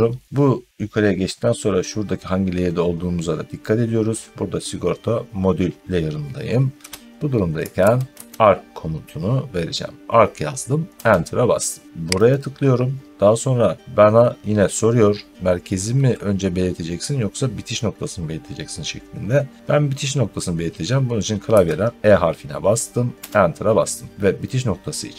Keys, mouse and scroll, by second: 7.2-8.6 typing, 10.8 Return, 12.2 click, 21.4 e, 23.0 Return.